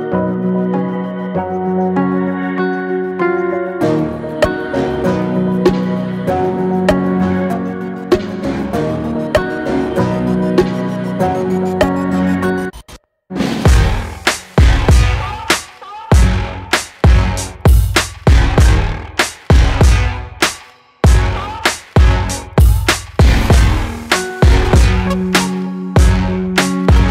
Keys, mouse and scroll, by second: 0.1 s, 1.9 click, 2.9 g, 4.6 ctrl+b, 7.2-7.7 scroll up 6, 7.7 shift+middle click, 8.6 scroll down 1, 10.4-10.8 scroll up 1, 10.8 scroll down 1, 11.0 Tab, 11.7 Tab, 13.9 ctrl+r, 16.1 click, 16.6 alt+click, 18.2 alt+e, 23.6 scroll down 1, 23.9 middle click, 24.3 Tab, 24.6-24.9 scroll down 1, 24.9-25.4 middle drag, 25.4 click, 25.8 click, 26.1-27.1 right drag.